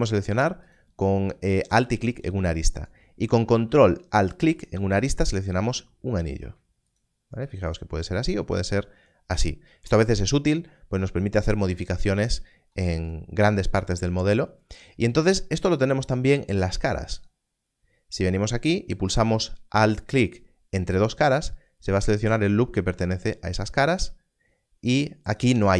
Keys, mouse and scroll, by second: 2.1 alt+click, 4.5 ctrl+alt+click, 6.9 ctrl+alt+click, 7.6 ctrl+alt+click, 8.7 ctrl+alt+click, 21.2 alt+click, 25.2 alt+click.